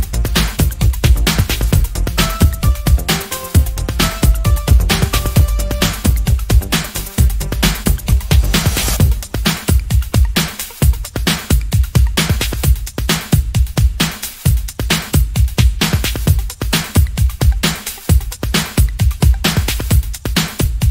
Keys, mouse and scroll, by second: 1.2 ctrl+shift+click, 2.1-5.1 ctrl+shift+drag, 6.4 ctrl+z, 7.1 ctrl+shift+click, 7.7-10.8 ctrl+shift+drag, 14.4 z, 15.9 click, 16.5 ctrl+click, 17.3 ctrl+click, 18.8 ctrl+shift+click, 20.3 click.